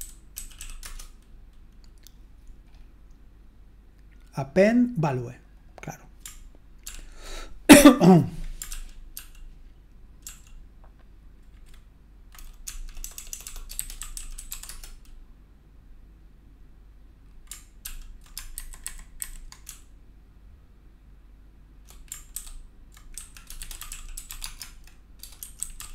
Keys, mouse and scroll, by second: 0.0-1.1 typing, 6.8 ctrl+p, 8.7 ctrl+p, 9.1 ctrl+p, 10.2 ctrl+p, 12.6-15.1 typing, 17.8 ctrl+p, 18.5 alt+b, 18.8 alt+b, 19.2 alt+b, 19.6 BackSpace, 20.3 BackSpace, 20.6 BackSpace, 21.0-22.3 BackSpace, 23.1 ctrl+e, 24.1 c.